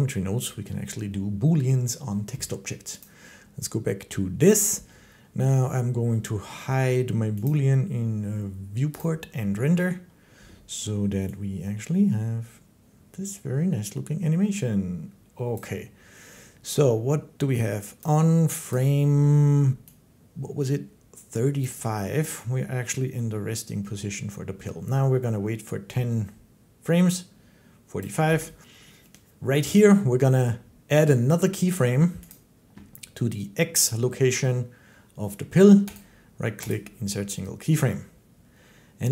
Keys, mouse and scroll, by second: 2.8 click, 3.6 right click, 7.3 click, 8.8 click, 15.3 click, 17.8 click, 18.5 click, 21.4 click, 27.8 click, 32.1 click, 35.8 click, 36.5 click, 37.7 middle click.